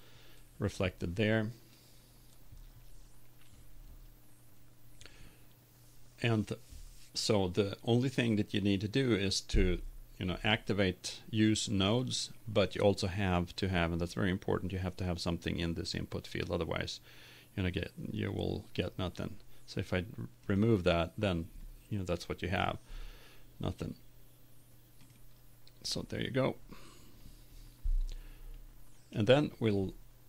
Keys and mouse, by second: 29.2-30.2 drag.